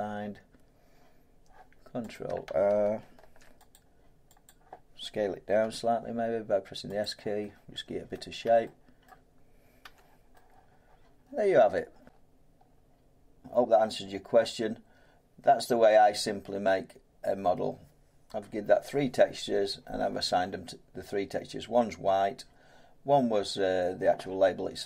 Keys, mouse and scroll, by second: 2.1 click, 3.1 ctrl+r, 3.7 click, 4.4 click, 5.6 s, 7.0 click, 8.1 middle click, 9.0 middle click, 9.8 Tab, 12.0 scroll, 12.3 middle click, 12.3-12.7 scroll up 10, 12.7 scroll down 10, 12.7 scroll up 5, 12.9-13.3 scroll down 1.